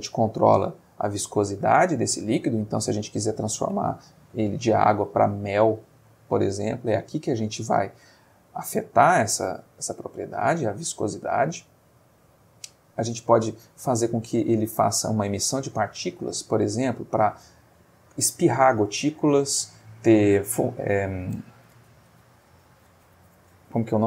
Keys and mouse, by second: 0.1 click, 2.2 click, 10.8 click, 11.6-12.5 middle drag, 12.9 click, 13.9 click, 14.7 click, 15.6 click.